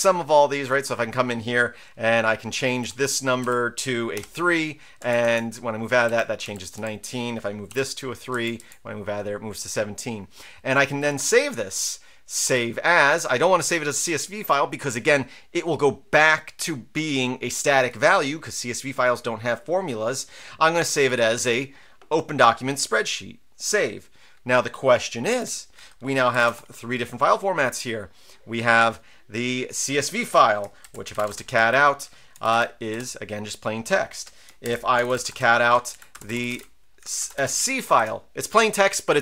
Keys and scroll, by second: 2.8 Return, 3.4 Up, 4.1 3, 5.0 Down, 5.2 Down, 6.0 Up, 6.4 Up, 6.7 Up, 7.7 3, 8.3 Down, 8.6 Down, 25.4 super+q, 26.1-26.9 typing, 30.8-32.3 typing, 32.5 Tab, 32.9 Return, 34.6 ctrl+l, 34.7-38.2 typing, 35.9 Right.